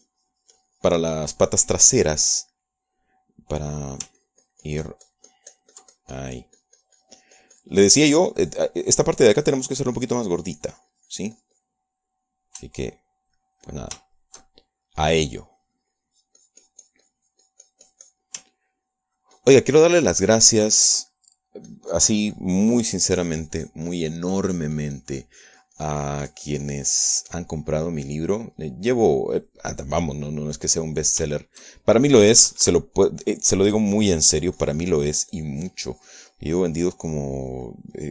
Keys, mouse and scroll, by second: 5.1 ctrl+middle click, 5.3-13.7 ctrl+drag, 13.7-16.1 middle drag, 16.2-19.5 shift+drag, 19.6-22.2 ctrl+drag, 22.2 ctrl+middle click, 22.8-28.7 ctrl+drag, 28.8-31.9 ctrl+middle drag, 31.9 click, 31.9 right click, 32.4 shift+middle click, 33.4 KP_Add, 34.3 middle click, 34.9-38.1 drag, 37.8 right click.